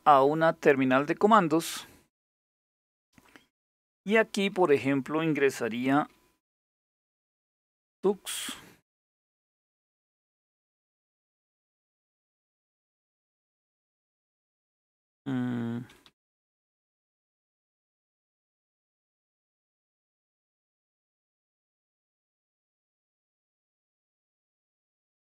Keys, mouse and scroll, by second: 0.7 click, 2.0 click, 6.6-12.4 typing, 7.8 Return, 13.5-18.1 typing, 19.5-25.1 typing.